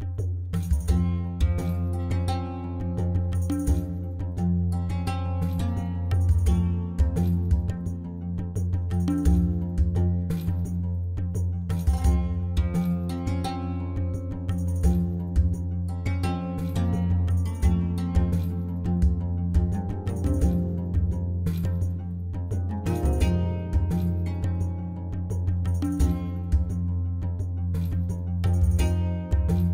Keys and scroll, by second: 1.4 ctrl+z, 2.0 Escape, 3.9 7, 5.6 Return, 13.7 Return, 16.3 7, 17.5 Return, 19.3 2, 19.6 Return, 22.6 ., 22.8 9, 23.0 Return, 24.5 Tab.